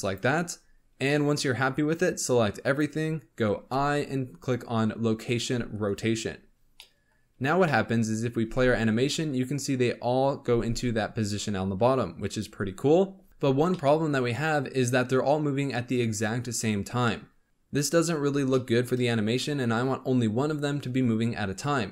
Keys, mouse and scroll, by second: 0.5-1.0 scroll down 1, 1.0-1.9 middle drag, 1.9 click, 6.7-7.2 middle drag, 7.2-7.6 scroll up 1, 7.6-8.4 shift+middle drag, 8.4 space, 10.4 space, 12.2-13.7 drag, 13.7-15.1 shift+middle drag, 15.1-16.2 scroll down 1, 16.2-17.0 scroll up 1, 17.0-20.9 middle drag, 20.9-21.8 scroll up 1, 21.8 scroll down 1.